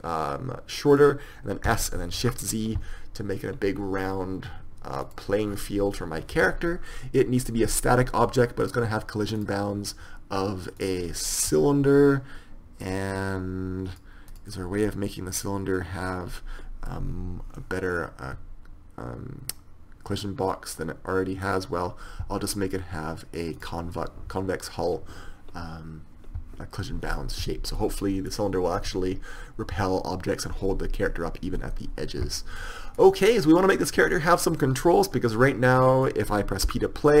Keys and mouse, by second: 2.1 s, 5.9-9.0 middle drag, 9.0-24.0 drag, 28.2-33.8 middle drag, 33.8-36.1 right drag, 36.1-37.2 drag.